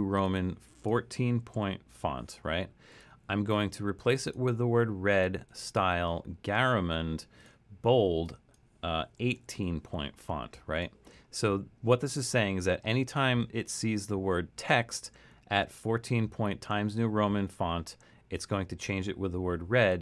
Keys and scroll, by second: 1.0-1.8 typing, 9.1 typing.